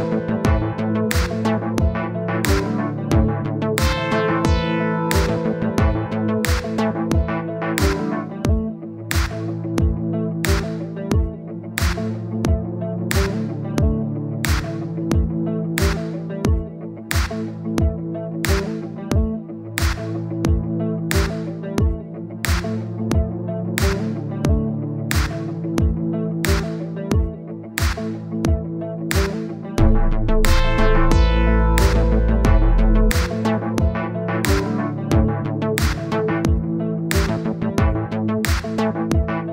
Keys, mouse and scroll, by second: 1.0-2.3 middle drag, 2.3 click, 3.1-4.7 middle drag, 4.7 click, 5.5-7.7 middle drag, 8.1 middle click, 8.8 click, 9.1-9.7 scroll up 1, 9.7-10.9 scroll down 12, 10.9-12.2 drag, 12.6-15.9 middle drag, 16.2-16.8 scroll up 11, 16.8 click, 17.3 KP_0, 19.2-23.2 middle drag, 25.3 KP_1, 26.6 click, 26.9-27.3 scroll up 1, 28.2 scroll down 1, 29.3 click, 30.1-32.0 scroll up 10, 32.6 scroll down 2, 32.8-33.2 scroll up 1, 33.2 click, 33.6 scroll down 1, 33.8-35.1 middle drag, 37.2 click, 37.5 click, 38.6-39.5 drag.